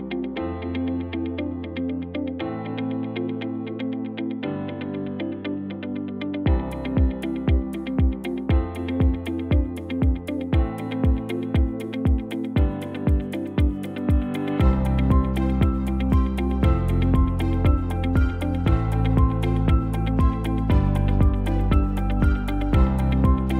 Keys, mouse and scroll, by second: 19.1 space, 22.5 space.